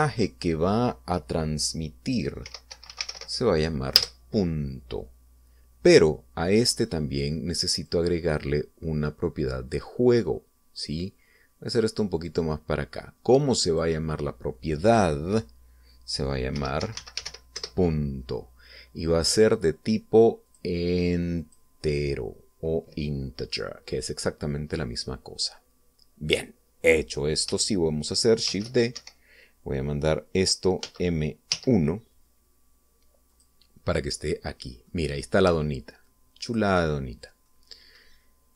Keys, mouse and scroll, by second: 3.3-4.0 typing, 4.8 Return, 8.6 click, 11.1-13.3 drag, 14.5 click, 17.4-18.1 typing, 18.4 Return, 21.3 click, 22.3 click, 29.3 shift+d, 29.8 shift+Escape, 31.7 m, 32.4 1, 34.2 click, 34.7 scroll down 2, 35.1 middle click, 35.9 scroll down 1, 36.9 click, 37.6-38.1 scroll down 1, 38.3 middle click.